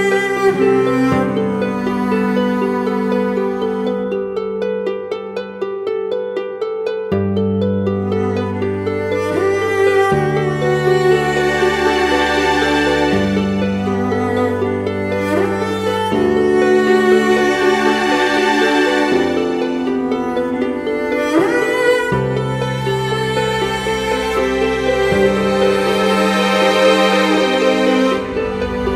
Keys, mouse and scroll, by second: 20.0-22.3 scroll down 2, 27.9-28.7 typing.